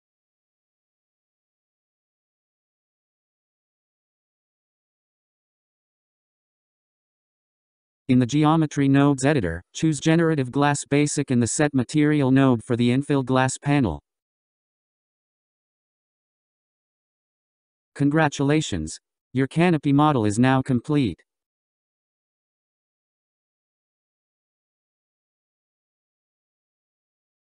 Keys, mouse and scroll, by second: 0.7-1.8 scroll, 2.6 click, 4.1 scroll, 5.2-7.2 drag, 7.2-8.9 scroll, 10.9-14.1 drag, 15.5-17.8 drag, 17.8-18.6 scroll down 3, 18.6-23.2 middle drag, 23.2-24.1 scroll down 3, 24.1-27.3 middle drag.